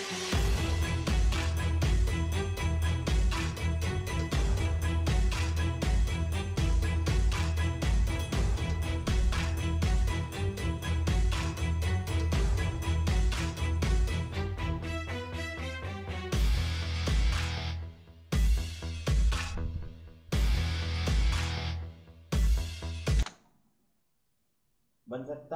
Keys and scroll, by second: 23.2 space.